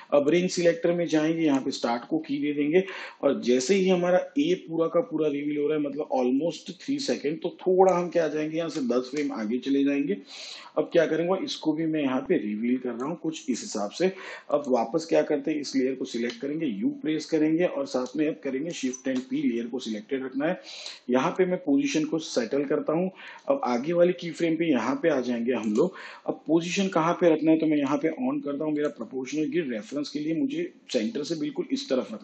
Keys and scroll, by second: 10.1 shift+Page_Down, 17.7 u, 20.3 shift+p.